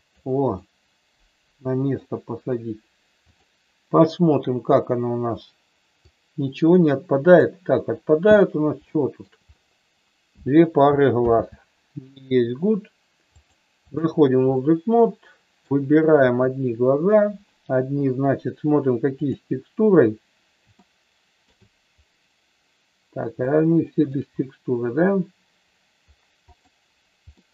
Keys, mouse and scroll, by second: 0.6-1.9 middle drag, 5.9-7.4 drag, 8.8 shift+middle click, 11.2 ctrl+z, 13.3 click, 14.4-15.5 middle drag, 16.3 click, 19.5 click, 27.3 middle click.